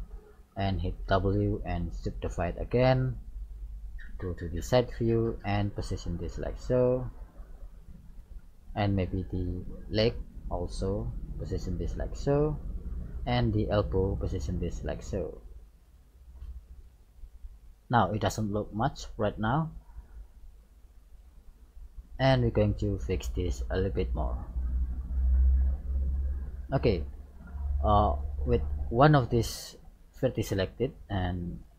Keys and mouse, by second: 1.0 middle click, 1.2 w, 3.1 right click, 4.1 KP_3, 5.6-7.6 drag, 8.4 middle click, 9.3 right click, 10.0-11.7 middle drag, 11.3-13.1 drag, 13.6-14.6 right drag, 14.3 click, 15.6 click, 16.4-18.2 middle drag, 20.0-21.5 right drag, 20.8-22.3 drag, 23.2 middle click, 24.0-25.6 middle drag, 26.2-28.0 middle drag, 29.1 right click, 29.7 middle click, 30.2 right click, 31.0 middle click.